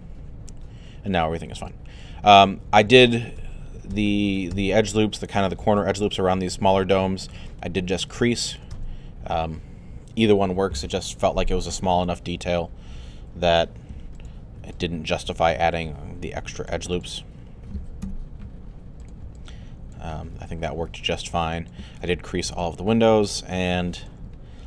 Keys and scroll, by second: 18.0 3.